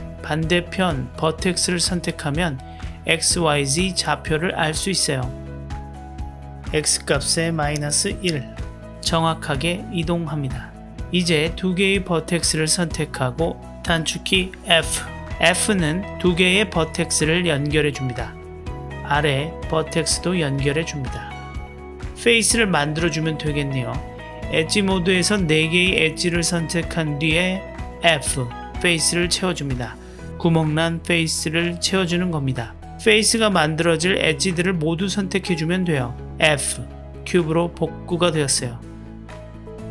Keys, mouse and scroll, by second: 1.5 click, 4.4 click, 5.7-9.2 drag, 10.7 middle click, 12.1 shift+click, 13.1-14.2 middle drag, 14.6 f, 15.7-17.8 middle drag, 18.5 click, 19.2 shift+click, 19.7-20.7 middle drag, 20.7 f, 21.3-23.9 middle drag, 25.0-25.8 drag, 26.2-27.5 middle drag, 27.7 f, 28.1-30.1 middle drag, 30.3-31.0 drag, 31.2-32.0 middle drag, 32.4 f, 32.7-33.9 middle drag, 34.4-35.0 drag, 35.8 f, 36.1-37.1 middle drag, 38.7 Tab.